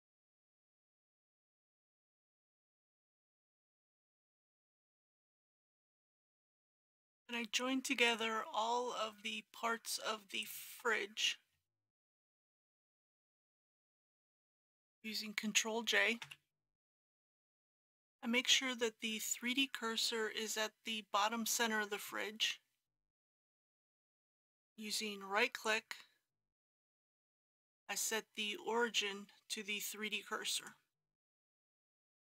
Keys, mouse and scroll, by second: 0.6 KP_7, 0.8 KP_0, 1.4 click, 1.9 KP_3, 2.6 click, 3.1 KP_5, 3.3 KP_0, 3.9 click, 4.4 KP_7, 4.6 KP_0, 8.1 click, 10.4 shift+click, 12.0 ctrl+click, 16.3 ctrl+j, 17.6 click, 17.8-24.1 middle drag, 25.6 right click, 30.6 click.